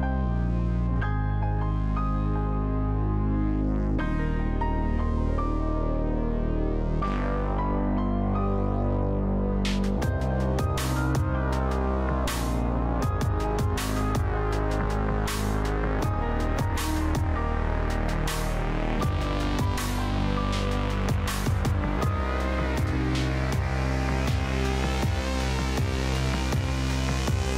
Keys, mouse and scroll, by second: 2.6 typing, 3.4 Return, 5.8 click, 19.0-21.7 middle drag, 21.7 scroll up 1, 22.1-23.0 scroll down 1, 23.0-27.5 drag.